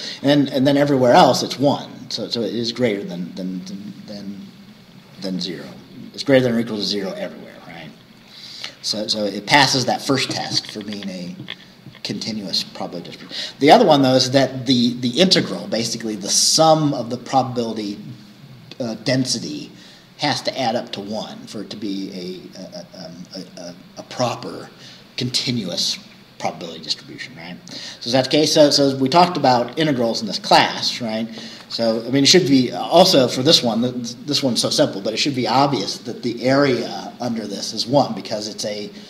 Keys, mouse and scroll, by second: 1.1 scroll up 1, 8.3-10.9 scroll up 1, 10.9-15.1 scroll up 1, 15.1-19.4 scroll up 1, 19.4-27.9 scroll up 1, 27.9-30.0 scroll up 1, 30.0-30.4 scroll down 1, 31.1-31.9 scroll down 2.